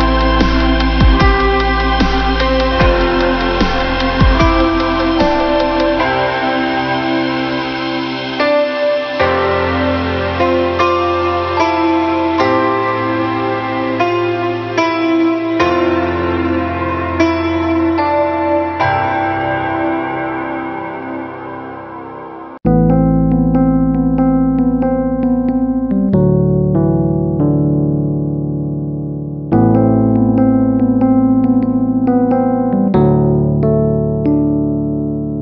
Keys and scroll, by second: 19.5 ctrl+-, 21.8 ctrl+=, 32.5 ctrl+=, 33.3 space.